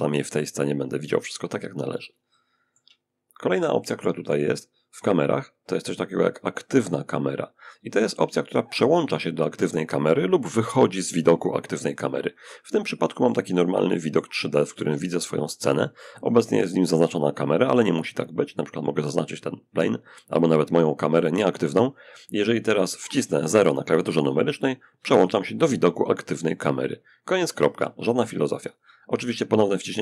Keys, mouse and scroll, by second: 0.3-2.6 middle drag, 3.1 click, 8.3 click, 11.9-15.0 drag, 15.0 shift+middle click, 17.1 click, 19.7 click, 24.2 0, 29.6 0.